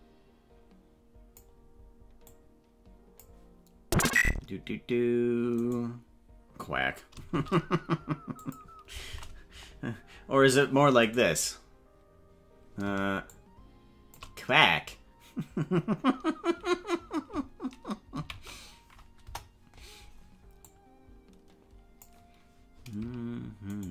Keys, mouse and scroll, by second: 2.3-3.3 drag, 5.5 right click, 7.3 shift+d, 9.5 KP_0, 11.4 right click, 13.2-14.2 shift+drag, 18.1 ctrl+z, 19.2 KP_0, 20.6-22.1 drag.